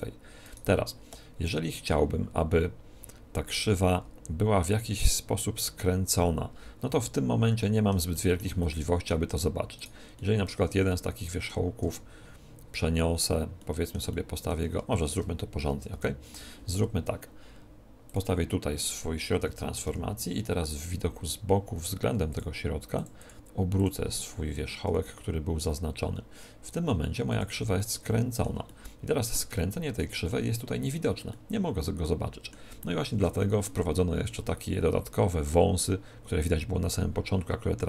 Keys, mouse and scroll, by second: 0.4-2.3 right drag, 6.9-12.7 middle drag, 9.7-11.5 right drag, 13.1-14.9 drag, 14.8-15.8 middle drag, 14.9 shift+c, 15.6 KP_1, 16.0 KP_7, 18.0-19.8 drag, 19.3 KP_1, 19.8 KP_3, 22.3-24.9 drag, 24.8 r, 27.3-29.1 drag, 29.1-34.5 middle drag.